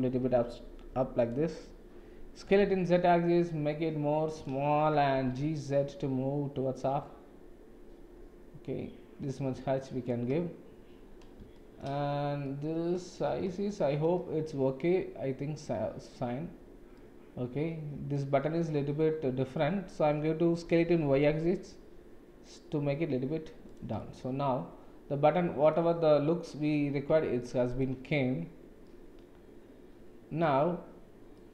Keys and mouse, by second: 2.4 s, 5.2 g, 11.6 shift+middle drag, 12.4-12.9 middle drag, 13.7 shift+middle click, 17.0-18.1 middle drag, 19.6-19.9 shift+middle drag, 20.6 s, 24.0-25.7 middle drag, 27.4-27.8 shift+middle drag, 28.8-30.5 middle drag, 31.4 middle click.